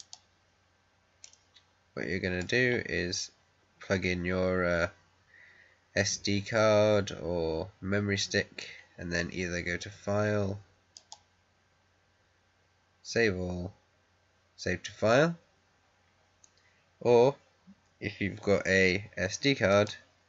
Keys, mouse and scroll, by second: 0.9 scroll up 1, 1.1-4.7 middle drag, 10.9 click, 19.6 click.